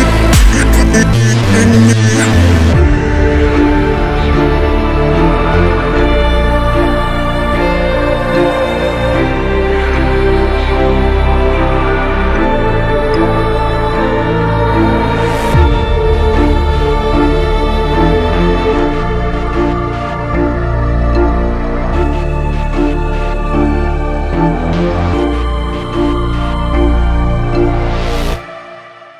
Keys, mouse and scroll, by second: 0.1 alt+scroll down 1, 1.0 click, 2.1 alt+scroll up 1, 2.9 click, 4.9 click, 6.0 click, 11.9 alt+Num_Lock, 11.9 click, 12.0-13.5 alt+scroll up 4, 13.8-14.2 alt+scroll up 2, 15.4 click, 16.0 b, 16.7 click, 22.6 ctrl+z, 22.8 click, 26.8 alt+scroll down 1, 27.8 alt+scroll down 1, 29.0 alt+scroll down 1.